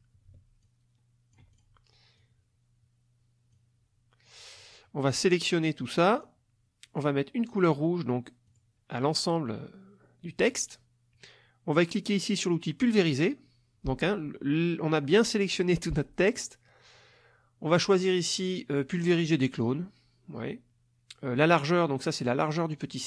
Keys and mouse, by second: 0.6-1.8 ctrl+drag, 2.1-3.7 drag, 5.2-6.4 drag, 8.5 click, 12.8 click.